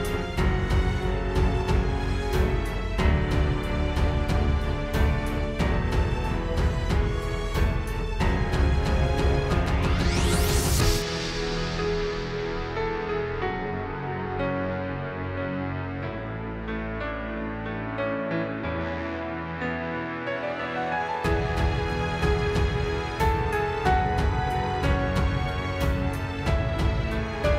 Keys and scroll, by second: 0.0 space, 0.5 super+space, 1.4 space, 2.1 space, 2.9 super+s, 3.3 space, 3.9 super+space, 6.1 super+j, 12.1 space, 19.4 space, 25.0 space.